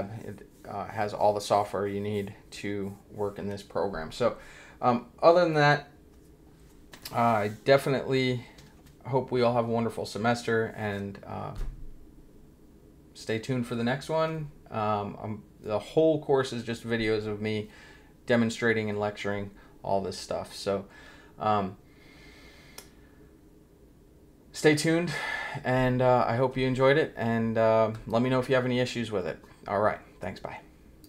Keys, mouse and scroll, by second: 31.0 click.